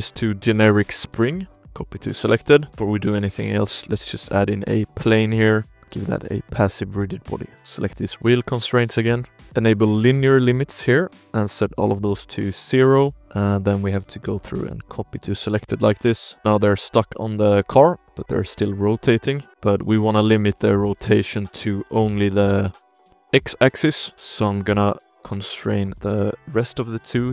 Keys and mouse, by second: 0.4-1.5 drag, 1.8 shift+middle click, 2.1 middle drag, 2.5 ctrl+s, 2.7 alt+a, 2.7 space, 3.8 s, 4.1 click, 4.6 drag, 4.9 s, 5.1 click, 6.8 click, 7.6 shift+click, 8.1 ctrl+s, 8.9 click, 9.5 shift+middle click, 11.0 click, 12.5 click, 13.2 click, 14.0-15.0 drag, 15.6-16.5 drag, 16.4 ctrl+s, 16.4 space, 16.7 click, 17.3-17.6 shift+drag, 18.0 drag, 19.1 click, 19.7 space, 21.0-21.6 drag, 21.8 shift+drag, 22.2-22.8 drag, 23.6 shift+click, 24.0 shift+click, 25.6 click, 26.0-26.8 drag, 27.2-27.3 drag.